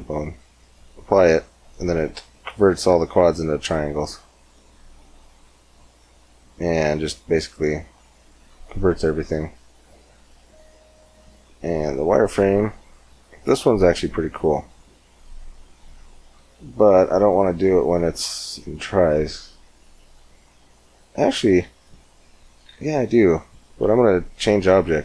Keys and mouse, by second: 0.9 Tab, 6.4-7.8 middle drag, 8.2 Tab, 14.1-18.3 middle drag, 19.1 middle click, 21.6 ctrl+z, 22.7 ctrl+z, 24.2 x, 24.9 shift+a.